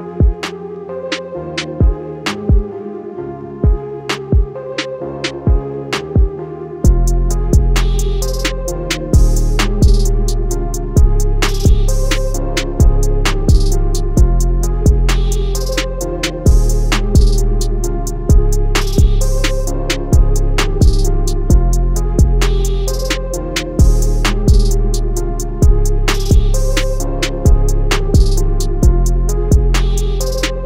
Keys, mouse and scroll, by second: 1.3 click, 5.1 alt+Num_Lock, 5.4 scroll down 1, 7.4 alt+scroll down 1, 8.2 scroll up 1, 8.7-9.2 scroll down 1, 9.2 click, 17.6 click, 18.4 ctrl+z, 19.8 click, 21.0 z, 22.0 click, 25.5 click.